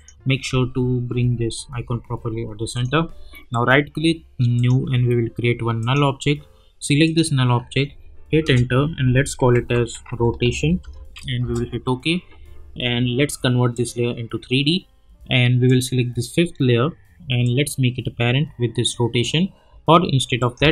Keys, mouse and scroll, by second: 1.2 Right, 2.7 click, 3.5 right click, 4.5 click, 8.4 Return, 9.1-11.3 typing, 11.4 Return, 13.7-20.4 drag, 17.7-18.9 drag.